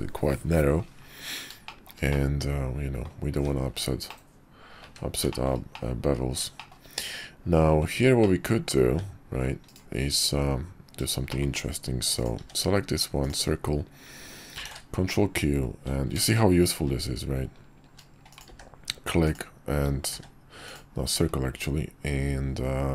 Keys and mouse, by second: 1.6 shift+middle click, 2.1-3.0 middle drag, 3.3 `, 4.1-4.8 middle drag, 4.8 `, 5.3 middle click, 5.7 middle click, 6.6 shift+middle click, 8.2-8.7 middle drag, 8.9 `, 10.1 `, 11.3 shift+middle click, 12.1 click, 12.4 d, 14.6 ctrl+q, 18.5 d, 20.1 d, 21.6-22.9 drag.